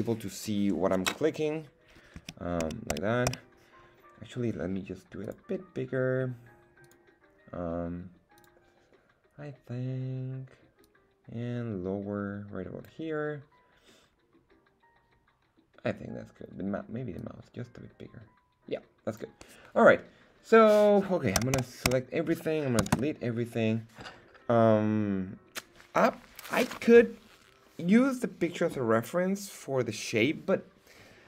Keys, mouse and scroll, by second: 2.2 a, 2.6 a, 3.2 a, 5.2 click, 6.8 click, 8.3 click, 10.8-12.1 drag, 12.2-13.9 drag, 17.1 click, 17.7-19.2 drag, 21.3 a, 21.5 a, 22.7 x.